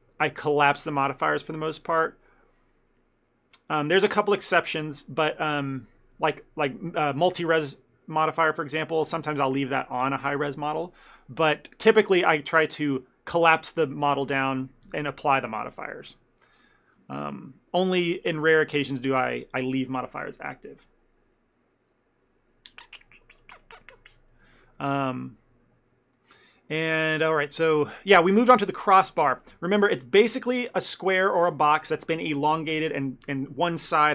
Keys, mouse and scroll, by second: 17.5 middle click, 18.6 a, 18.7 a, 19.0 ctrl+middle click, 19.2 middle click, 24.9 middle click, 25.2 ctrl+middle click, 26.3 middle click, 26.5 shift+middle click, 26.9 ctrl+middle click, 27.4 middle click, 27.7 shift+middle click, 28.5 click, 28.7 ctrl+middle click, 29.1 shift+middle click.